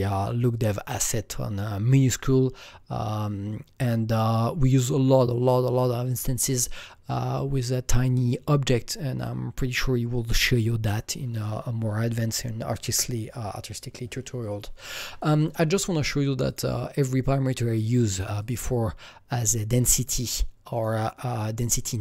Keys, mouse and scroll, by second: 15.1-16.4 drag, 16.4-18.3 drag, 18.3 click, 20.7 click, 21.7 click.